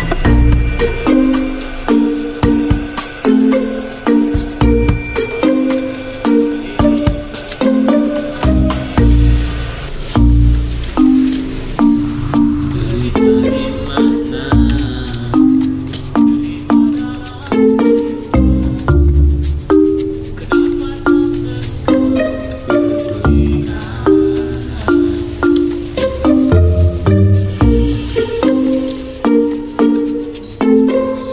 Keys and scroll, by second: 2.1 F9, 12.4 v, 19.7 Delete, 22.9 d, 27.4 d.